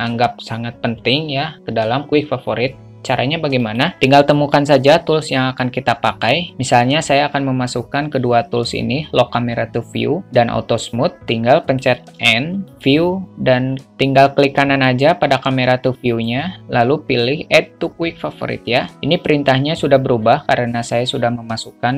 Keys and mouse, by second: 12.1 click, 12.4 n, 16.5-21.9 right drag.